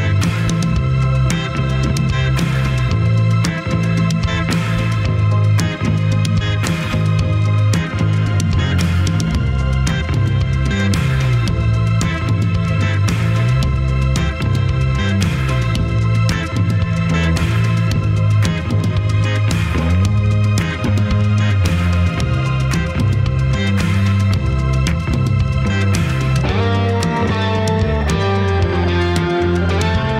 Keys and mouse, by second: 4.8-12.8 middle drag, 13.8 middle click, 16.6-18.0 middle drag, 18.4-19.1 middle drag, 22.0-22.4 drag, 22.0 3, 22.5 shift+click, 23.4 ctrl+KP_Add, 23.8 ctrl+KP_Add, 27.6-29.7 middle drag.